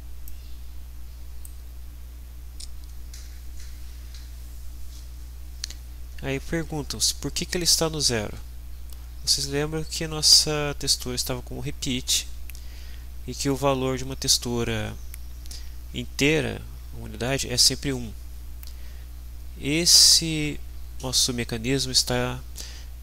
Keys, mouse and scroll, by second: 0.3-1.6 drag.